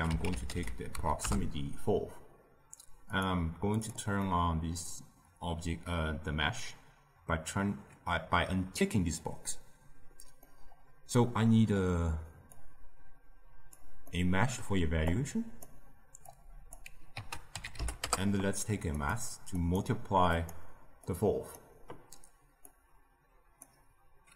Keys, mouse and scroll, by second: 3.7 click, 4.1-12.5 middle drag, 12.5-14.0 drag, 14.0-15.0 middle drag, 15.0-16.3 drag, 17.1 ctrl+a, 19.5 click, 20.4-21.0 drag, 22.6-24.3 drag.